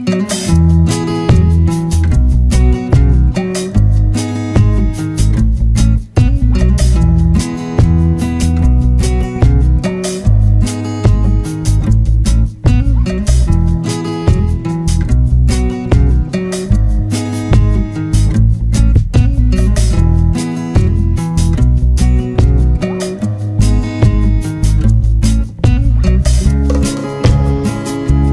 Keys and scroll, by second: 2.4 Down, 3.1 Right, 20.2 Return, 27.0 BackSpace, 28.0 Return.